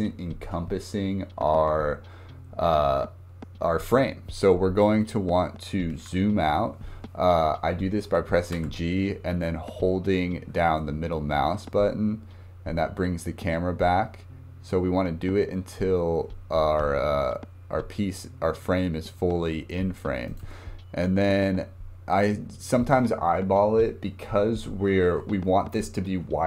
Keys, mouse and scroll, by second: 8.5 g, 20.4-21.3 scroll up 1, 21.4 scroll down 2, 21.7 scroll up 2.